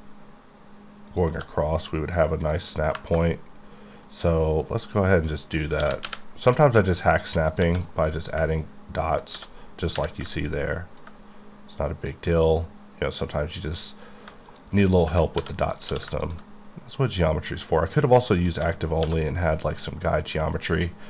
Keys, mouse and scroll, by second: 1.1 click, 1.3 c, 2.5 click, 2.9 KP_Enter, 4.0 right click, 4.8 click, 5.4 click, 5.8 g, 6.0 y, 7.9 middle click, 8.1 scroll up 2, 9.3 d, 11.0 ctrl+click, 14.9 scroll up 1, 15.4 3, 15.6 click, 15.9 q, 16.2 ctrl+click, 18.4 click, 18.8-19.5 scroll down 6, 19.0 1, 19.5 middle click.